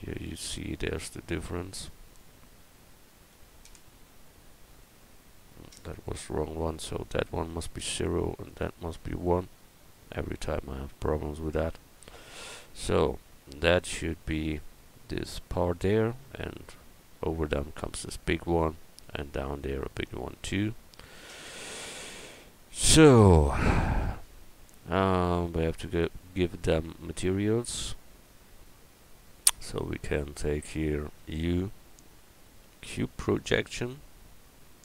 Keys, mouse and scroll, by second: 0.0 Tab, 8.4-10.1 middle drag, 10.3 middle click, 12.4 middle click, 13.6 Tab, 18.5 middle click, 18.7-20.1 middle drag, 21.5 Tab, 25.3 middle click, 26.9-28.0 middle drag, 29.5 a, 31.2 u.